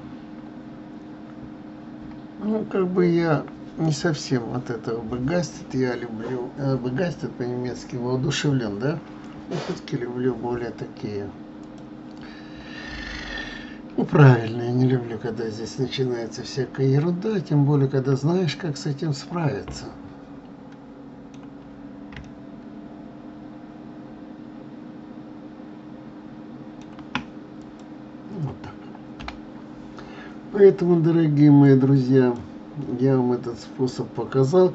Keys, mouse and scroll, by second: 20.0-25.5 middle drag, 27.7 click, 29.5 F12.